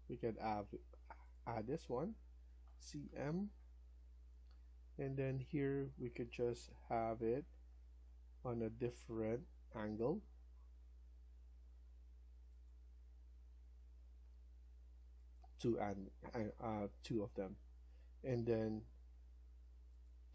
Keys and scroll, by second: 2.3-3.5 typing, 15.7 Escape, 16.0 Escape, 16.3 Escape.